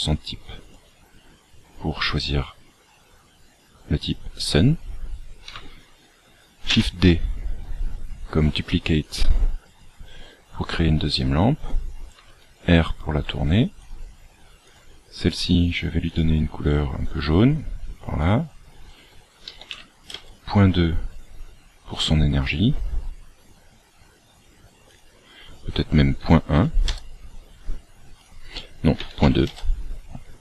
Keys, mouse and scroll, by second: 0.7 click, 6.7 shift+d, 12.1 r, 14.7 click, 18.1 click, 24.9 click, 28.2 click.